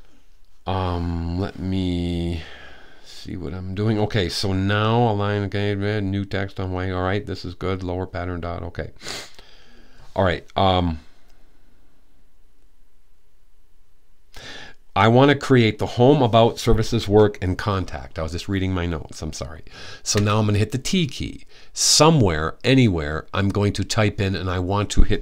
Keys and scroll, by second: 19.9 t.